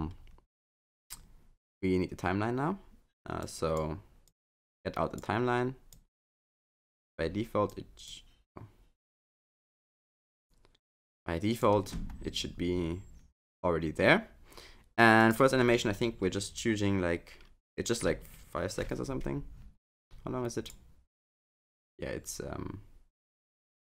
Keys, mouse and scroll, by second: 1.1-3.1 scroll up 1, 3.4 click, 4.3 click, 5.9 click, 7.7 click, 9.7 click, 11.1 click, 15.2 click.